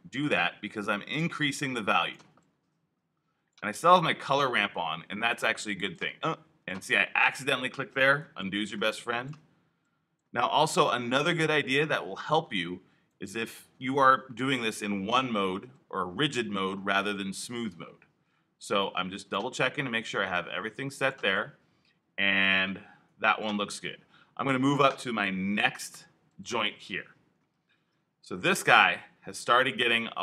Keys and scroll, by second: 8.3 super+z, 15.0 i.